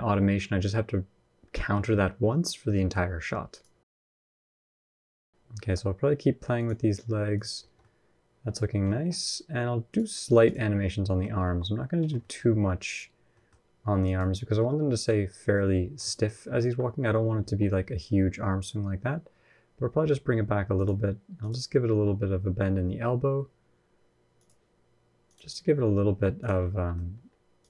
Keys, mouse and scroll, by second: 2.1-2.6 scroll down 2, 2.4 middle click, 3.3 click, 4.1 KP_1, 4.2 KP_3, 4.8 ctrl+KP_3, 5.0 shift+middle click, 5.1 scroll up 2, 5.4 g, 6.8 g, 7.4 scroll down 2, 7.6 middle click, 8.3 scroll down 2, 8.6 shift+middle click, 9.0-9.6 scroll up 1, 9.7 click, 10.6 middle click, 11.2 r, 12.0 middle click, 12.6 click, 13.1 middle click, 13.8 click, 14.3 middle click, 15.9 ctrl+KP_1, 16.2 ctrl+KP_3, 17.2 r, 21.2 click, 21.6 r, 25.0 click, 25.4 r, 26.4 middle click, 26.8 scroll up 1, 27.4 click, 27.4-27.6 scroll up 2.